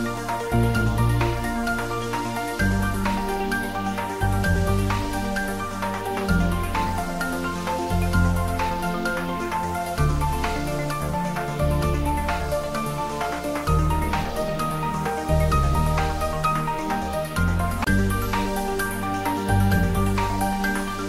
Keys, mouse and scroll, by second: 0.7 Return, 1.7 ctrl+middle click, 2.2 ctrl+click, 3.1 ctrl+middle click, 4.2 click, 4.4-5.5 typing, 5.7 Up, 6.2 click, 6.9 ctrl+s, 7.9-9.5 middle drag, 9.5 ctrl+middle click, 10.0-14.1 middle drag, 14.1 ctrl+middle click, 14.5-15.7 middle drag, 16.0 ctrl+s, 16.7 middle click, 17.2-18.9 middle drag.